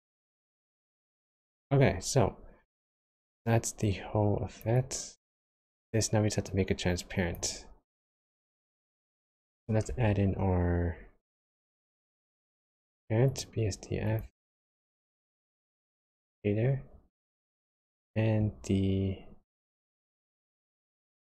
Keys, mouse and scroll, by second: 0.9 click, 1.8-3.8 scroll down 7, 3.8 click, 4.7 click, 6.4 click, 7.8 click, 8.5 click, 9.8 shift+a, 14.3 shift+a, 17.6 shift+a.